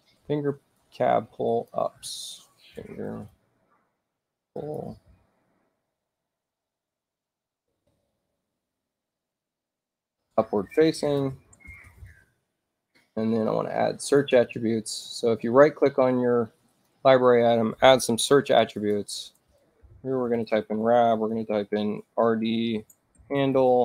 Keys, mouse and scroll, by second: 0.7 click, 2.6-8.2 typing, 10.1-12.5 typing, 14.0 right click, 16.7 click, 18.7 click, 19.4-23.8 typing.